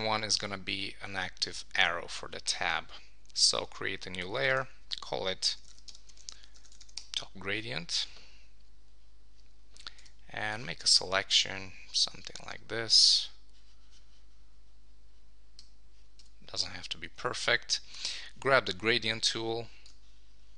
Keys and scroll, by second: 7.0 Return.